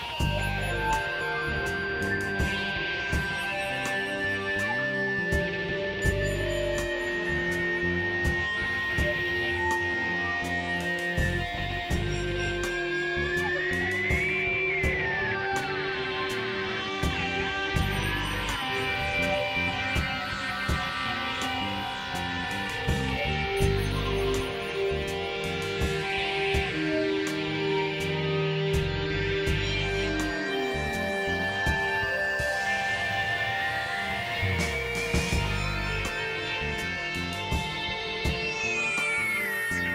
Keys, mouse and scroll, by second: 0.0 click, 0.6 click, 1.4 click, 2.9-4.3 drag, 4.7 click, 5.6 middle click, 6.7 middle click, 8.1 KP_Divide, 8.9 click, 9.3 right click, 9.9 KP_Divide, 10.4 click, 10.5 middle click, 10.7 KP_1, 12.2 click, 12.4 click, 13.1 x, 13.8-15.8 drag, 15.5 x, 17.9 click, 18.6 click, 20.0-21.8 alt+drag, 22.2 click, 23.4 click, 24.3 click, 25.0 KP_3, 26.4 middle click, 27.0 KP_3, 27.4 KP_3, 27.7 KP_1, 28.9 x, 29.3-30.1 drag, 31.0 x, 32.3 click, 34.4 click, 35.4 click, 36.5-37.5 drag, 38.8 KP_1, 39.2 KP_3.